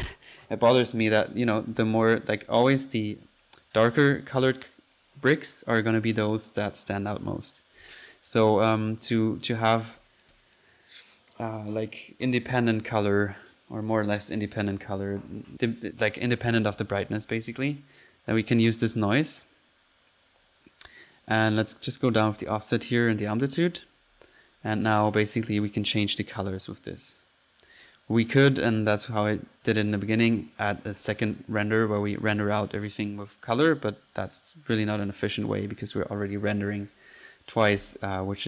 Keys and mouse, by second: 2.4 click, 8.4-9.1 typing, 8.4 click, 9.2 F1, 17.0 Escape, 17.2-17.9 typing, 18.7 click, 19.2 click, 19.4 drag, 22.0 drag, 22.5 click, 25.4 click, 27.6 right click, 27.9 click, 28.3 click, 29.0-29.6 drag, 29.7 click, 30.0-30.3 drag, 31.0-31.5 middle drag, 32.8 drag, 33.8-35.0 drag, 35.6 click, 35.9 click, 37.9-38.4 typing.